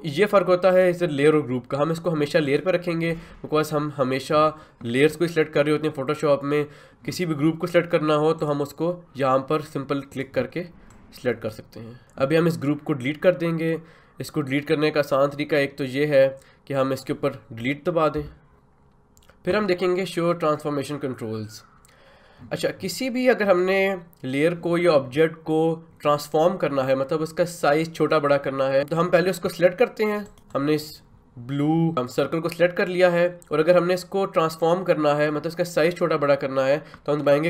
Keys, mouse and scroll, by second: 8.4 click, 18.1 Delete, 18.5 click, 30.2-37.4 ctrl+drag.